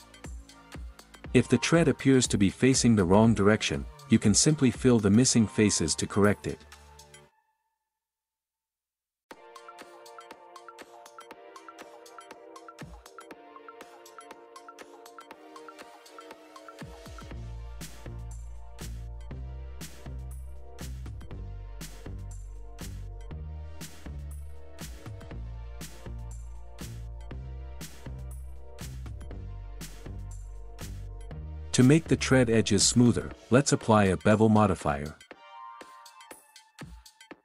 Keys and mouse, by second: 0.0 drag, 1.1 Tab, 4.8 Tab, 6.1 click, 7.2 ctrl+KP_3, 7.6 shift+z, 8.2 click, 9.2 shift+z, 10.5 ctrl+KP_3, 12.8 click, 14.3 click, 14.8 middle click, 15.4 middle click, 16.5 middle click, 17.3 Tab, 17.4 drag, 19.5 Tab, 19.8 ctrl+KP_3, 20.8 click, 21.8 Tab, 22.3 Tab, 23.0 click, 23.7 Tab, 24.5 ctrl+s, 25.6 middle drag, 32.7-33.0 shift+middle drag, 33.6 middle drag, 35.6 click, 36.7 Tab.